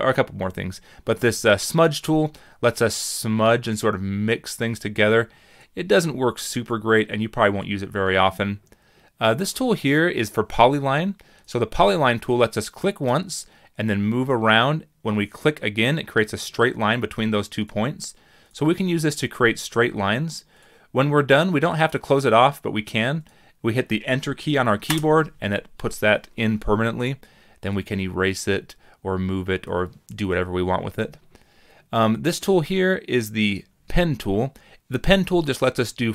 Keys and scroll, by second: 24.9 Return.